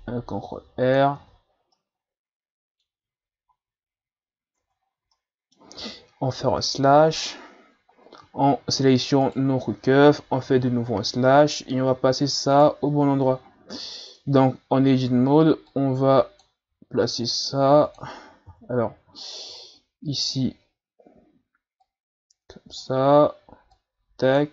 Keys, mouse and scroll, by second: 1.2 Tab, 1.8-3.4 middle drag, 3.4 Tab, 4.6 Tab, 4.9 scroll down 2, 5.2-6.5 middle drag, 6.5 KP_Divide, 7.9-8.2 scroll up 4, 9.2 shift+right click, 10.4 KP_Divide, 12.6 right click, 13.4-14.2 scroll up 4, 14.2 Tab, 14.8 a, 15.1 a, 15.7-16.8 drag, 16.8 s, 18.5 KP_3, 19.3-20.2 scroll down 4, 20.2-21.6 shift+scroll down 2, 21.8-23.1 drag, 23.1-23.7 scroll up 2, 23.7 click.